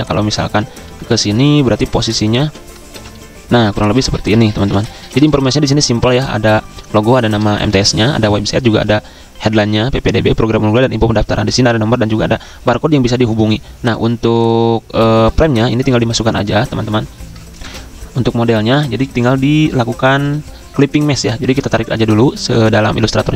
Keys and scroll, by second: 0.0-0.1 typing, 0.8 ctrl+v, 1.6 z, 2.4 ctrl+z, 2.8 ctrl+f, 3.7-5.6 typing, 17.5 super+e, 23.2 z.